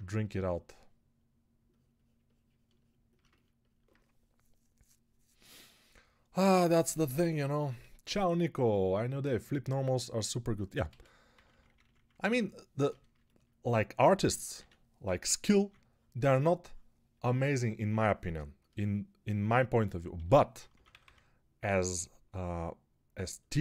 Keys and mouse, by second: 10.7-12.1 typing, 14.4-15.5 typing, 20.0 g, 20.4 ], 20.6 ], 20.9 ].